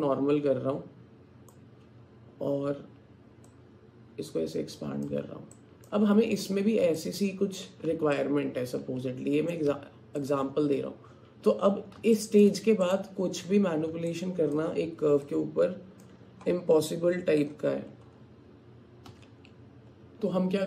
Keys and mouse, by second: 0.0-1.7 drag, 3.8 click, 4.5-5.9 drag, 5.9 alt+middle click, 7.0 alt+click, 8.2-9.5 alt+drag, 9.7 Tab, 12.2 shift+click, 12.9 click, 14.3 alt+click, 15.3 alt+click, 16.2-18.7 middle drag, 19.1 Tab.